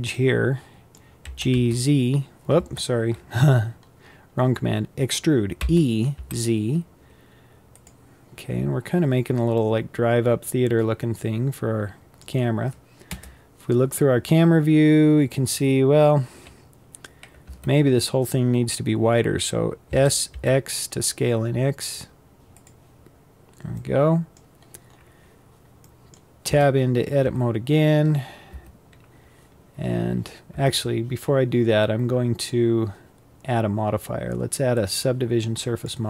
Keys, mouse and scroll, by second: 0.9 g, 3.5 scroll up 5, 4.4-5.1 scroll down 1, 5.1 e, 8.0-8.6 scroll down 3, 8.6-9.1 scroll up 4, 9.1-12.6 middle drag, 12.6 KP_0, 17.0 Tab, 19.4 s, 22.8-23.2 scroll down 2, 23.2-24.2 middle drag, 24.2-25.3 scroll down 7, 25.3 middle click, 26.0 Tab, 26.7 Tab, 28.1 Tab, 30.1 Tab, 35.4-36.0 drag.